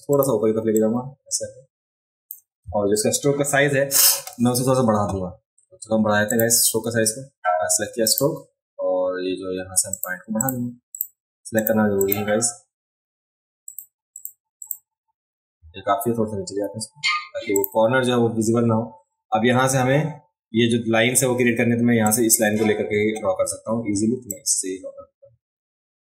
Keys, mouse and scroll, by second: 0.1 click, 0.7-2.3 drag, 6.3 click, 8.0 click, 9.9 click, 10.4 click, 10.9 click, 11.6 click, 12.0 click, 13.7 click, 14.1 click, 14.6 click, 17.5 click, 22.1 click, 24.3-26.1 drag.